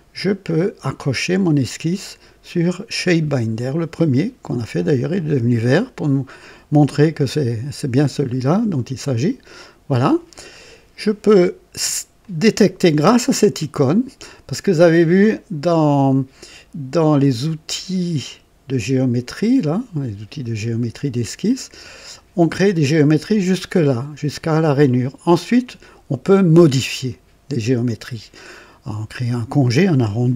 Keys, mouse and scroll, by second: 2.9 click, 9.1 click, 12.1 click.